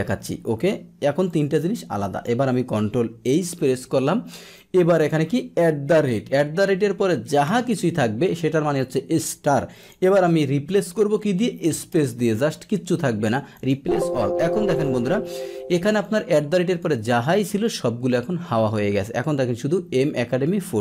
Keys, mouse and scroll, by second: 1.2 click, 3.5 ctrl+h, 4.5 click, 9.7 click, 13.5 click, 14.6 click, 16.0 click, 16.6 click.